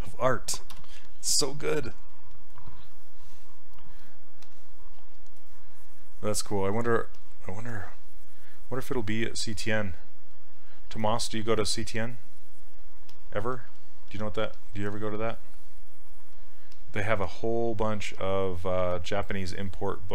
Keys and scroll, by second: 0.8 z, 5.0 s, 14.3 ctrl+z.